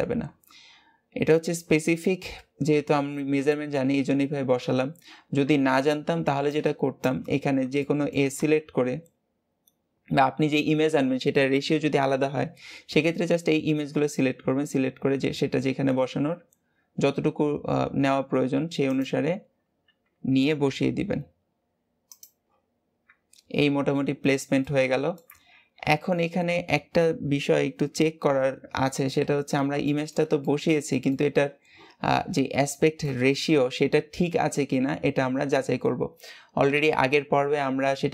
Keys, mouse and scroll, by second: 6.1 b, 7.7 shift+middle click, 8.3 g, 19.1-19.5 scroll up 3, 20.2 g, 22.3-22.7 scroll down 3, 23.0 Tab, 24.0-24.6 scroll down 2, 24.6-25.2 middle drag, 25.2 Tab, 28.2 Tab, 29.0-29.8 scroll up 2, 29.8-31.4 shift+middle drag, 31.4-32.0 scroll up 1, 32.0-32.6 scroll down 2, 32.6-35.7 shift+middle drag.